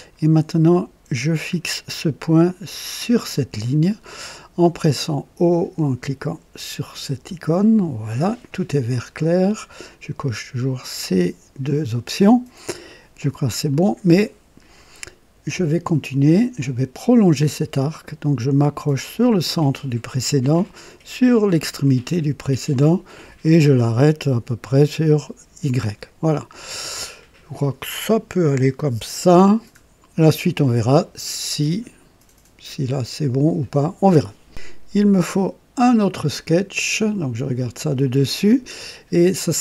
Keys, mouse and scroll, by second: 1.3 click, 3.3 click, 7.1 o, 13.7-14.4 right drag, 16.5 click, 19.0 click, 21.6 click, 25.0 click, 26.3 scroll up 2, 26.8 right click, 29.2-29.6 scroll down 1, 37.5 click, 38.4 right click.